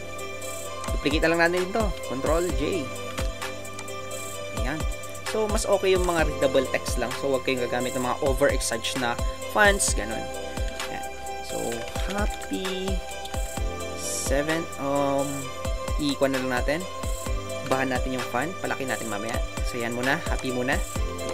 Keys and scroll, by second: 10.7 ctrl+a, 15.5 typing.